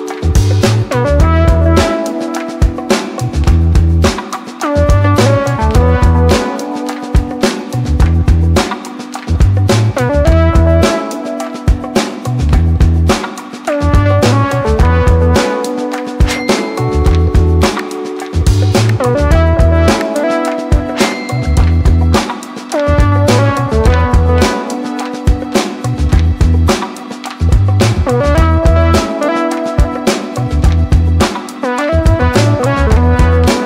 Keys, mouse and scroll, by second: 1.6 ctrl+space, 2.0-3.3 typing, 4.7-12.9 drag, 12.9 space, 15.8 click, 17.6 space, 20.3 typing, 21.1 click, 21.5-22.1 typing, 25.0 click, 27.1 space, 27.4 click, 28.7 ctrl+c, 29.7 click, 31.3 ctrl+v, 32.3 space.